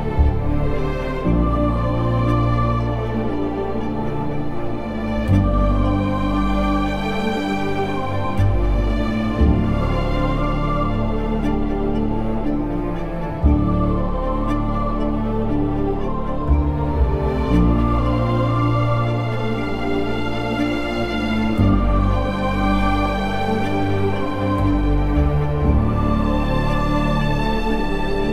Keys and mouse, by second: 0.2 alt+z, 0.9 alt+z, 1.5 g, 3.5 Tab, 3.9 z, 7.2 middle drag, 9.1 Tab, 10.6 KP_3, 11.0 z, 12.3 2, 16.6 alt+shift+click, 17.8 alt+shift+click, 18.8 ctrl+z, 22.3 alt+shift+click, 23.1 alt+shift+click, 24.5 alt+shift+click, 25.0 alt+shift+click, 27.0 alt+shift+click.